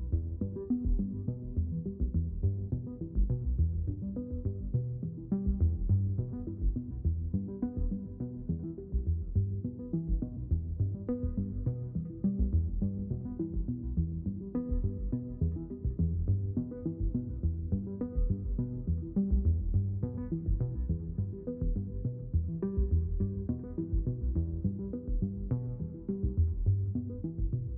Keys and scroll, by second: 3.1 Return.